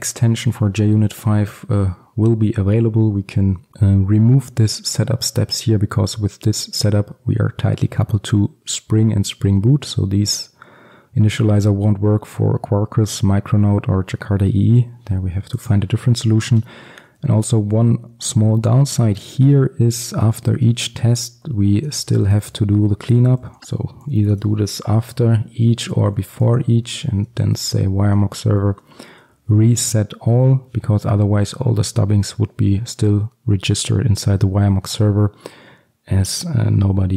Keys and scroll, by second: 27.3 Return.